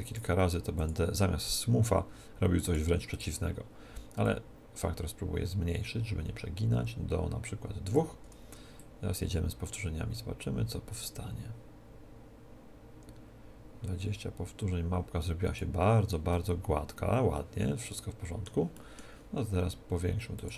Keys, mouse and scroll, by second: 3.2-6.0 drag, 8.8 click, 16.3-18.2 middle drag, 18.8-20.4 middle drag, 20.4-20.5 drag, 20.4 middle click.